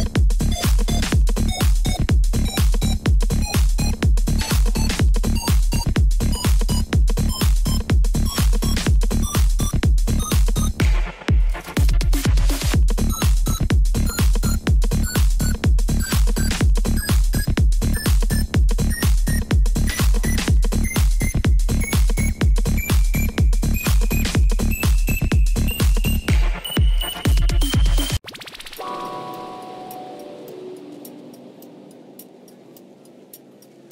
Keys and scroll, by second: 5.1 Return, 12.3 Tab, 12.9 Tab, 16.3 1, 16.5 alt+a, 17.4 g, 18.2 g, 18.9 g, 19.5 g, 21.1 3, 22.5 g, 23.8 g, 24.6 g, 25.9 Caps_Lock, 27.1 g, 28.0 g, 30.0 g, 31.6 g, 32.4 g, 33.5 g.